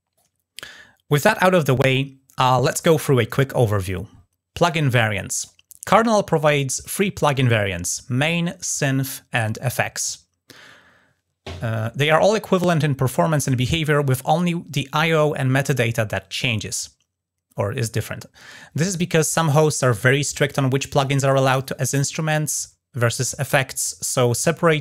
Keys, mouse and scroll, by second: 3.1-4.1 scroll down 4, 4.5-5.0 scroll up 2.